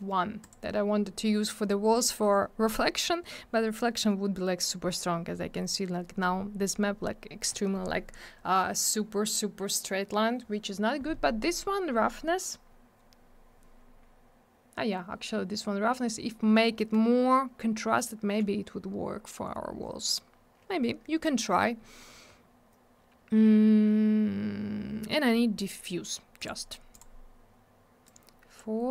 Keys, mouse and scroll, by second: 0.4 click, 0.5 click, 26.4 click, 26.4 click, 26.9 click, 27.0 click, 28.0 click.